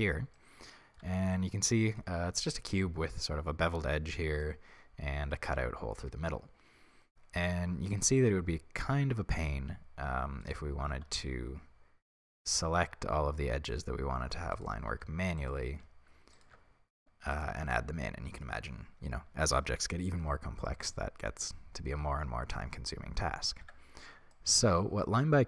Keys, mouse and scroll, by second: 1.0 Tab, 4.9 middle click, 5.8-8.4 middle drag, 10.4 alt+right click, 11.1 a, 12.2 click, 13.7 alt+right click, 14.6 alt+shift+right click, 15.4-16.4 alt+right drag, 16.7-17.3 scroll down 1, 17.4 alt+shift+right click, 17.9-25.4 middle drag, 23.6 Tab, 25.2 scroll up 1.